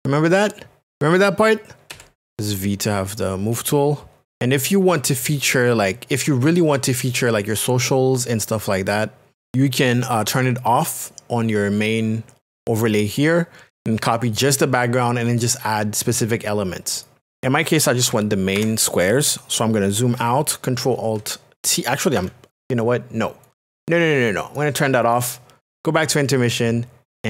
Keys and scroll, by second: 1.9 v, 18.0 ctrl+KP_Subtract, 22.2 alt+t.